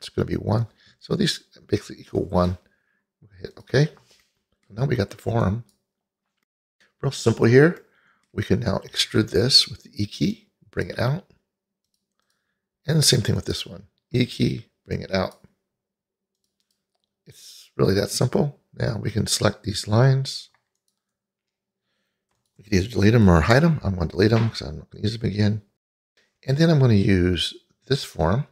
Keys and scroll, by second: 9.0 e, 14.2 e, 23.6 Delete.